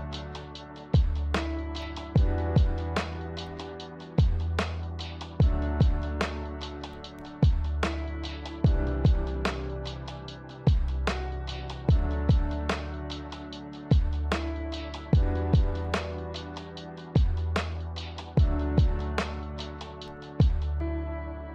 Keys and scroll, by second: 8.5 g, 15.2 v, 20.5-21.5 typing.